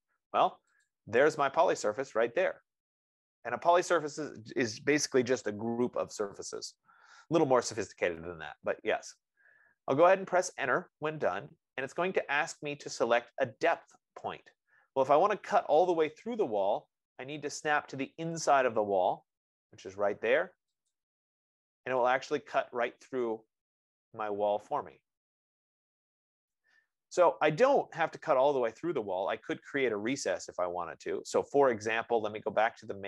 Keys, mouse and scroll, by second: 1.2-6.1 drag, 11.5 Return, 21.2-24.7 drag, 25.2 click, 25.7 click, 26.7-32.0 right drag.